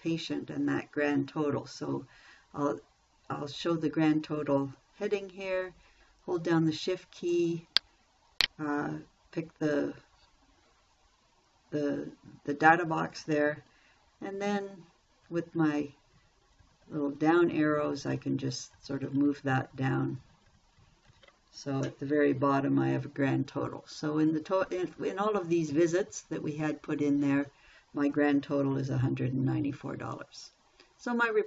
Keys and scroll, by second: 14.6 Down.